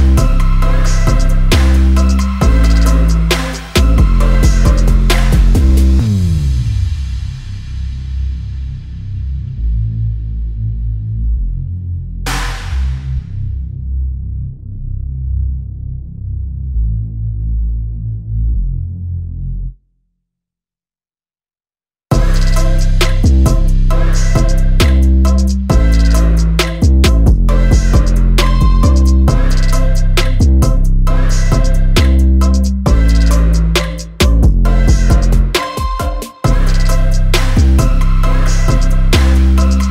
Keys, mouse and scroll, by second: 1.4 Tab, 1.5 scroll up 2, 1.6-5.2 typing, 2.5 scroll up 1, 3.5 click, 3.8 scroll down 2, 5.9 scroll up 1, 6.0 middle click, 6.3 scroll down 1, 6.4 click, 7.2 KP_3, 7.4 KP_1, 7.5 g, 7.8 middle click, 7.9 s, 8.4 middle click, 8.8 scroll down 2, 8.9 KP_3, 9.1 KP_1, 9.2 scroll up 4, 9.5 Tab, 9.6 1, 9.7 g, 10.0 scroll down 2, 10.0 shift+middle click, 10.2 Tab, 10.3 scroll up 1, 10.4 shift+middle click, 10.5 scroll down 1, 10.8 click, 11.5 f, 11.8 shift+middle click, 12.0 click, 13.2-14.0 drag, 14.0 f, 14.3-16.1 drag, 16.4-17.9 drag, 18.0 shift+middle click, 18.9-20.1 drag, 20.1-20.6 shift+middle drag, 20.6 click, 21.5 scroll down 1, 21.6 shift+middle click, 21.8-22.2 scroll up 2, 21.9 shift+middle drag, 22.2-23.3 drag, 23.3 scroll down 2, 23.3 shift+middle click, 23.8 scroll up 2, 23.9-25.6 drag, 25.6 scroll down 1, 25.7-26.1 shift+middle drag, 26.1 scroll up 2, 26.2 shift+middle click, 26.4-28.6 typing, 26.7 click, 27.1 drag, 27.4 middle drag, 27.9 click, 28.1 middle click, 28.3 Tab, 28.6 Tab, 28.9 click, 29.0 middle click, 29.1 click, 29.8 shift+middle click, 30.1 click, 30.9 shift+middle drag, 31.1 f, 31.3-31.8 drag, 31.8 scroll down 2, 31.9 shift+middle click, 32.1 scroll up 1, 32.2 f, 32.4-32.8 drag, 32.8-33.2 scroll down 4, 33.0 KP_1, 33.2 shift+middle click, 33.3-33.8 scroll up 5, 33.4 f, 33.8-34.6 drag, 34.6 scroll down 2, 34.6 shift+middle drag, 34.9 drag, 35.2 shift+middle click, 35.4-35.7 scroll down 2, 35.4 shift+middle click, 35.7 shift+middle click, 35.9-37.1 scroll up 3, 36.0 shift+middle click, 37.1 click, 38.4 click, 38.4 scroll down 3, 38.4 shift+middle click, 38.6 a, 38.8-39.9 shift+middle drag.